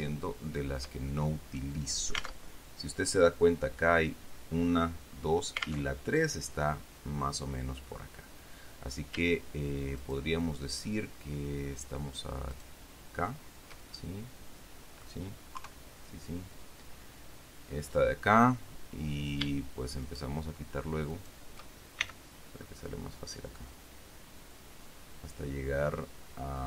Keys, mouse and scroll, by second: 0.0 shift+right click, 2.7 alt+Tab, 6.2 alt+Tab, 10.3 shift+right click, 12.9 shift+right click, 14.2-15.6 shift+middle drag, 15.9 KP_3, 20.4 shift+right click, 21.5 shift+right click, 22.4 shift+c, 23.0-26.6 middle drag.